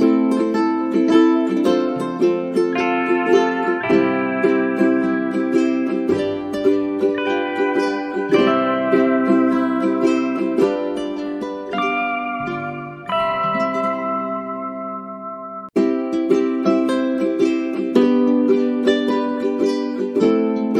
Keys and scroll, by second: 1.4 space, 9.0 space.